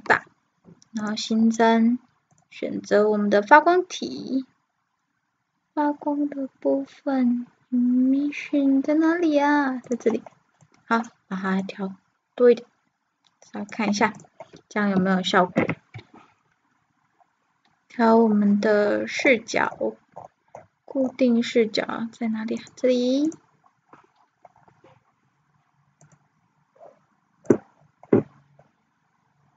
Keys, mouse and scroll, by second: 1.0-1.6 drag, 1.8 drag, 2.3-10.3 drag, 10.7 middle click, 11.7-18.3 drag, 15.6 KP_0, 18.9-23.5 middle drag, 23.5-25.8 drag, 25.3-26.8 middle drag, 26.8-29.5 drag, 29.2-29.5 middle drag.